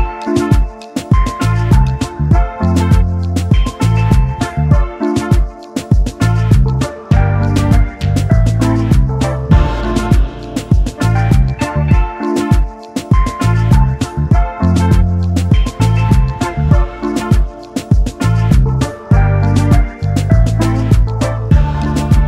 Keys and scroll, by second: 17.2 s.